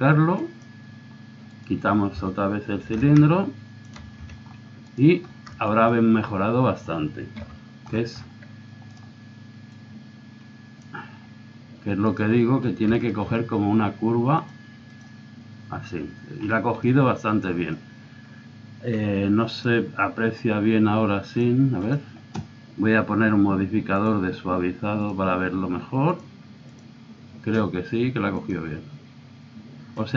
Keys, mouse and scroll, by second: 0.4-2.2 drag, 1.5 right click, 2.2 z, 3.0-4.2 drag, 3.0 right click, 4.2 z, 4.5 click, 7.4 KP_3, 9.7-10.7 middle drag, 10.7 click, 12.1 click, 13.0 middle click, 14.4-16.1 drag, 16.5-18.5 middle drag, 19.5 click, 20.0-21.3 drag, 21.4 click, 21.9-23.0 drag, 24.0-25.8 drag, 26.1-30.1 drag.